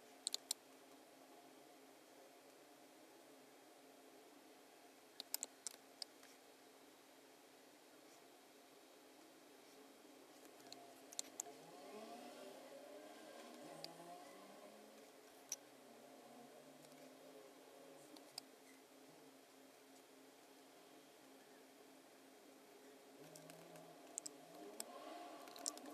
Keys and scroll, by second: 0.3 space, 5.2 space, 5.7 space, 10.7 BackSpace, 11.2 space, 18.1 space, 23.5 super+-, 24.5 space, 25.4 super+=, 25.7 space.